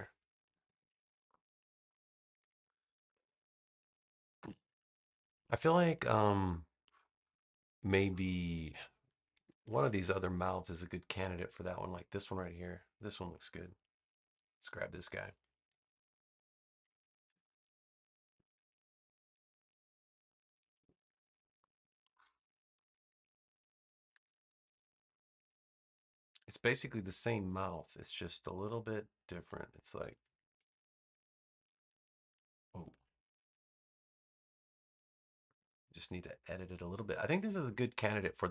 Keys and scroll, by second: 0.4 super+=, 1.3 space, 9.2 super+-, 15.5 v, 17.2 super+c, 20.6 super+=, 21.6 space, 24.1 super+v, 32.8 super+z.